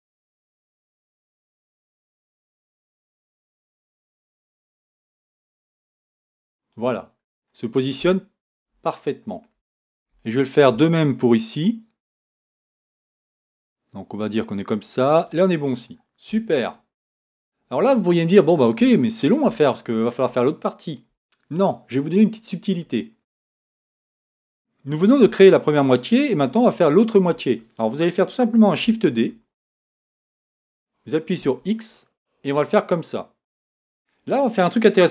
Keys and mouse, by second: 6.1-7.4 drag, 9.8-10.9 middle drag, 12.1-13.3 right drag, 29.2 shift+d.